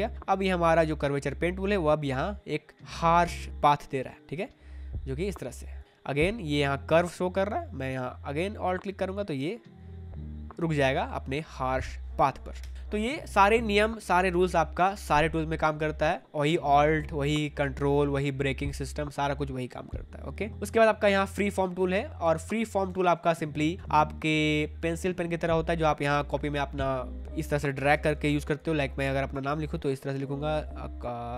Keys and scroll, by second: 12.5 Escape, 21.9 space, 22.8 space, 27.9 ctrl+z.